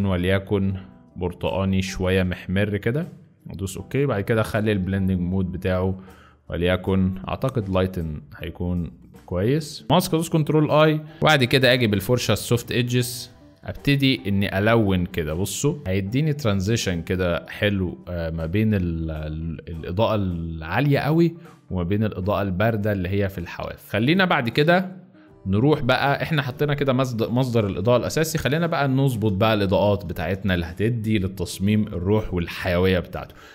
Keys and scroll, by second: 10.0 ctrl+i, 11.5 b, 14.7 x, 15.8 ], 23.8 space, 24.6 z, 28.3 z, 29.8 space, 33.2 space.